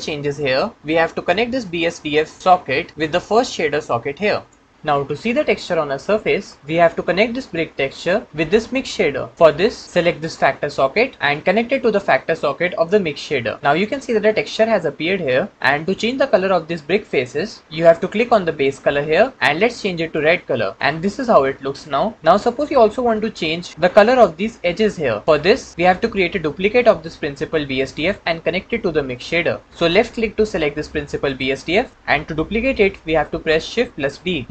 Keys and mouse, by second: 2.4-4.6 drag, 10.7 click, 11.2-13.1 drag, 31.1 click, 33.8 shift+d.